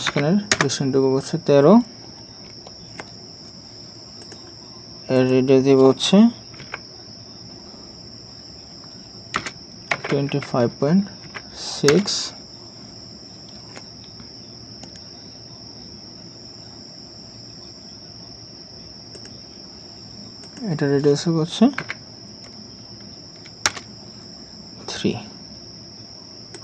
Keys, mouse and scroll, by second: 0.5 Return, 6.6 typing, 9.3-11.2 typing, 11.9 Return, 21.8 typing, 23.7 Return, 26.5 right click.